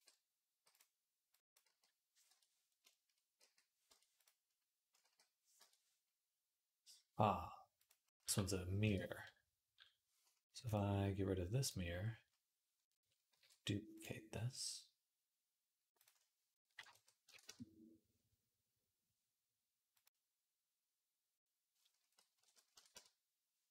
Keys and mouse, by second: 0.4 x, 1.1 click, 1.5 g, 1.8-10.5 middle drag, 3.2 g, 4.0 click, 4.8 g, 7.6 click, 8.1 g, 10.5-23.7 drag, 13.2 alt+d.